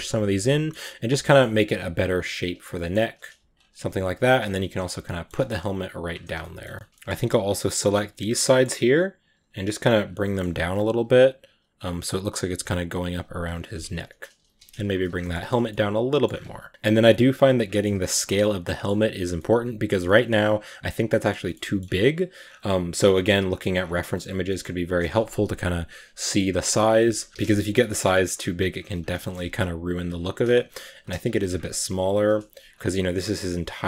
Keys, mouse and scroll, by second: 0.3 middle click, 0.9 right click, 1.1 middle click, 1.6 right click, 1.7 g, 2.6 scroll up 1, 2.9-3.2 scroll down 1, 3.2 g, 3.8 right click, 3.9 scroll down 1, 4.1 g, 4.9 middle click, 5.1-5.6 scroll down 3, 5.6 right click, 5.7 g, 6.2 a, 6.2 middle drag, 6.5 scroll down 1, 6.6-6.9 shift+middle drag, 6.9-7.6 scroll up 1, 7.6 g, 8.1 scroll up 1, 8.3 middle click, 9.1 right click, 9.2 g, 10.1 middle click, 10.6 right click, 10.8 g, 11.9 right click, 12.0 g, 12.8 right click, 13.0 g, 13.5-14.1 scroll down 2, 13.7 Tab, 14.1 right click, 14.3 g, 14.9 scroll down 1, 15.0-15.4 shift+middle drag, 15.4 scroll down 1, 15.5-16.1 middle drag, 16.1-16.5 scroll up 4, 16.5 right click, 16.7 g, 16.8 s, 17.5 shift+middle click, 17.8 a, 18.2-21.7 middle drag, 21.7-22.9 scroll up 3, 26.1 middle click, 26.3 scroll down 1, 26.6 right click, 27.2 middle click, 27.3 g, 28.0 middle click, 28.2 s, 28.8 a, 28.8 scroll down 4, 29.0-29.7 shift+middle drag, 29.7 right drag, 29.9 scroll up 1, 30.2 s, 31.1 g, 32.2 s.